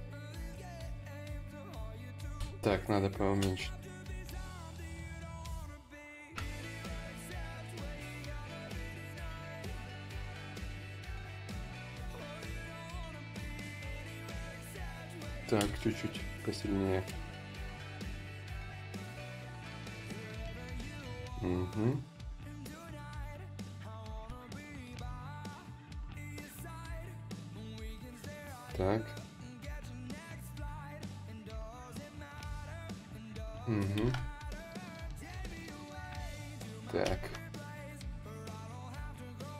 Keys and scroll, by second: 1.4 ctrl+z, 1.9 space, 15.3 space, 17.7-18.4 typing, 26.4 ctrl+z, 26.4 y.